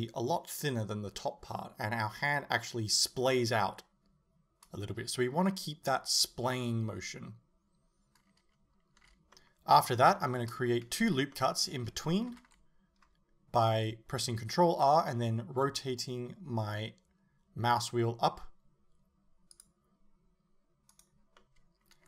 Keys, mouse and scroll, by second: 9.0 a, 12.4 ctrl+r, 21.0 right click, 21.4-22.0 middle drag.